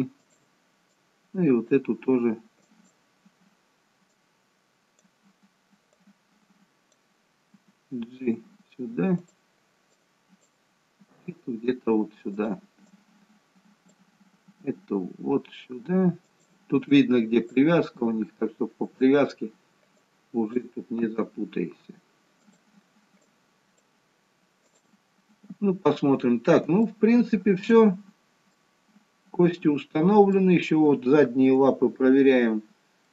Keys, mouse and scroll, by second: 1.1 click, 2.8 click, 7.6 g, 10.1 click, 11.1 g, 13.1 click, 14.7 g, 17.0 click, 18.1 g, 20.2 click, 21.2 g, 23.3 click, 24.8 click, 25.4-26.8 scroll down 2, 26.8 scroll down 2, 27.1 shift+middle click, 28.7 middle click.